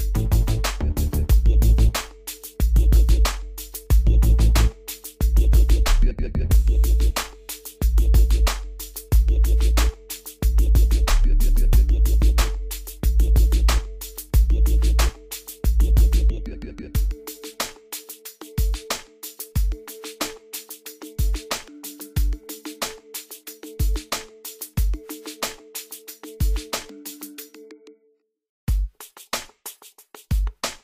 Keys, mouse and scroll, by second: 0.3-10.4 drag, 10.7-16.8 drag, 16.8 scroll up 1, 19.2 scroll down 1, 20.6 scroll up 1, 21.4 scroll down 1, 24.1 click, 24.8 scroll down 1, 26.6 click, 28.5-28.8 scroll down 1, 30.4 click.